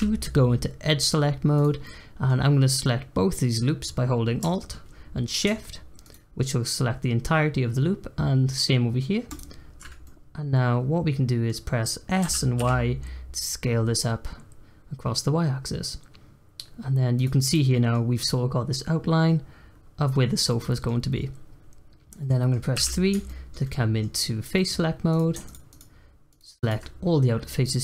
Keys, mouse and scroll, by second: 1.5 click, 1.8-5.0 middle drag, 6.0 alt+shift+click, 9.2 alt+shift+click, 10.0-11.6 middle drag, 11.6-12.2 scroll down 1, 12.2 s, 17.4 click, 17.7-22.7 middle drag, 22.7 3, 23.2-25.1 shift+middle drag, 25.1 click, 25.4 shift+click, 25.6 shift+click, 26.3 shift+click, 26.5 shift+click, 27.6-27.8 middle drag.